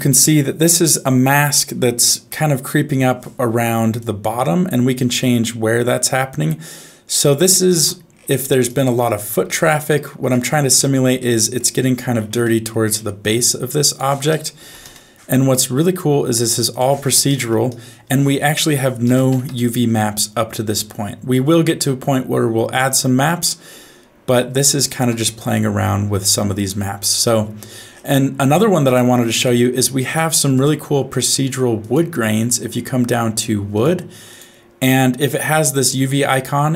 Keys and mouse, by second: 4.0-7.7 shift+drag, 8.4 middle click, 9.8 ctrl+shift+click, 11.2 middle click, 12.5 middle click, 14.0 click, 16.7 click, 18.4-19.5 drag, 20.8-23.6 middle drag, 24.7 shift+middle click, 25.3 middle click, 26.3 shift+middle click, 28.2 middle click, 28.9 click, 29.8 click, 30.5-31.5 drag, 31.8-33.8 drag, 34.3-36.7 drag.